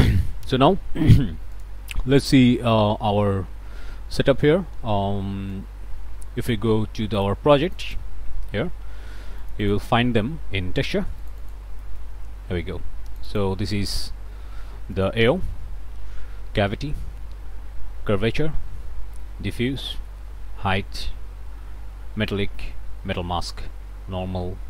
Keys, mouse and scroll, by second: 1.6 click, 5.6-6.7 drag, 7.2 click, 8.1-9.4 drag, 9.9-11.2 drag, 11.7-13.1 drag, 13.6-15.0 drag, 15.8 Right, 16.7 Right, 18.2 Right, 19.8 Right, 21.1 Right, 22.3 Right, 23.1 Right, 24.3 Right.